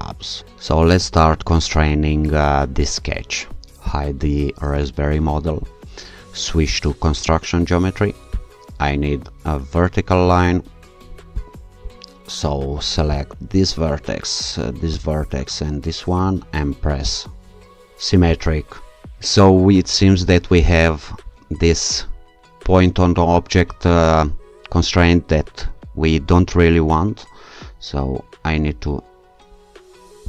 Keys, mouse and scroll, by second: 3.9 click, 6.7 click, 8.3 click, 11.4 click, 13.1 click, 14.9 click, 17.1 click, 18.2 s, 20.5-21.6 scroll up 2, 28.4-29.5 scroll down 2.